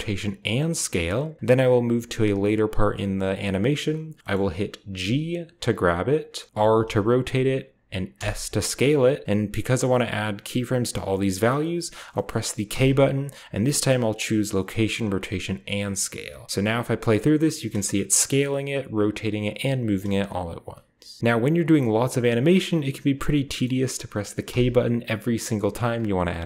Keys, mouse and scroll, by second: 0.3 click, 1.5-3.0 drag, 4.9 g, 6.0 click, 6.5 r, 7.1 drag, 8.0 s, 8.8 click, 9.2 click, 12.0-13.3 middle drag, 12.6 k, 15.5-17.1 drag, 18.5 space, 19.8-21.2 drag, 19.8 space, 21.7-22.2 drag, 24.3 k.